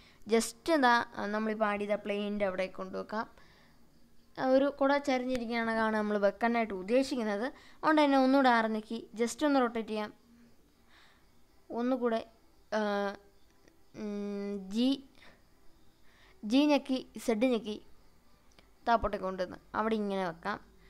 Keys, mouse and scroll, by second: 6.6 click, 8.2 r, 16.0 click, 17.6 g, 18.0 z.